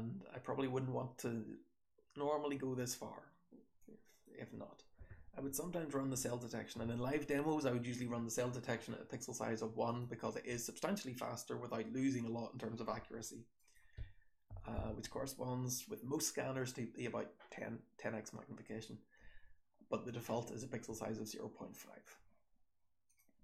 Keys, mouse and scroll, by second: 3.5 scroll down 1.